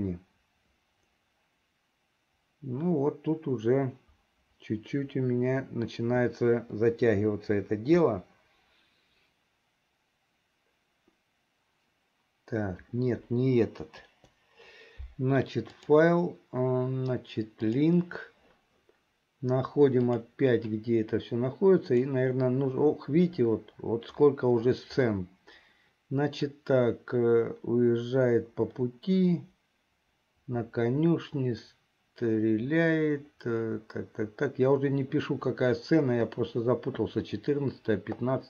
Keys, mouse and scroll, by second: 14.2 Delete, 15.7-18.2 drag.